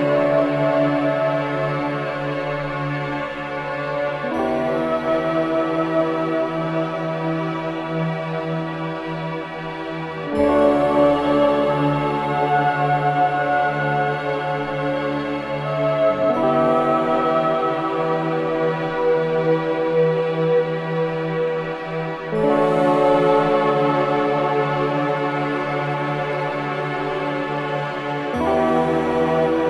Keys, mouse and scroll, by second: 0.0 alt+right click, 0.4 alt+click, 3.1 ctrl+Delete, 4.6 click, 5.9 ctrl+Delete, 7.0 scroll down 1, 7.3 alt+click, 8.3 alt+middle click, 8.9 ctrl+z, 10.5 ctrl+-, 10.6 ctrl+z, 15.5 click, 16.6 click, 18.7 ctrl+Delete, 20.2 click, 21.3 ctrl+Delete, 23.2 click, 24.3 ctrl+Delete, 26.9-29.5 drag, 29.5 Delete.